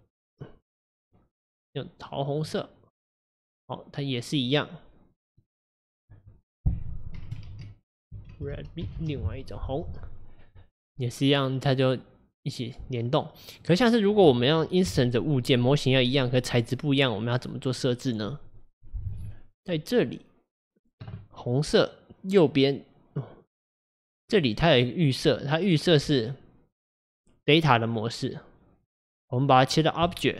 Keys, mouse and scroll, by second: 5.4-8.5 drag, 13.1 click, 13.7 click, 16.9 click, 17.9 click, 24.4-27.4 drag, 28.9-30.3 drag.